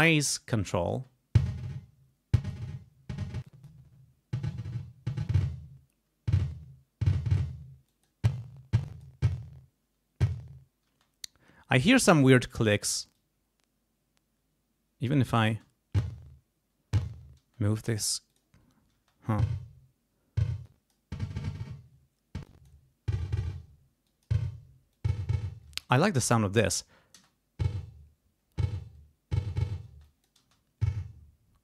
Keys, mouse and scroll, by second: 0.9 space, 2.3 click, 3.4 click, 5.3 click, 7.9 click, 8.8 click, 10.8 space, 11.9 click, 13.1-15.4 drag, 15.5 space, 17.4 space, 18.3 click, 18.9 space, 20.6 click, 22.4 click, 24.0 click, 24.9 click, 25.7 space, 26.6 click, 27.1 space, 29.9 space, 30.0-30.4 scroll up 1.